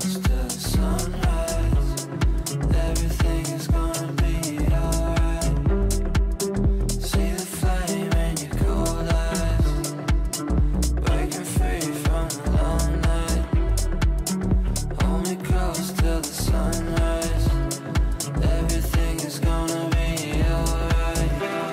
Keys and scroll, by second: 1.2 ctrl+z, 7.4 ctrl+z.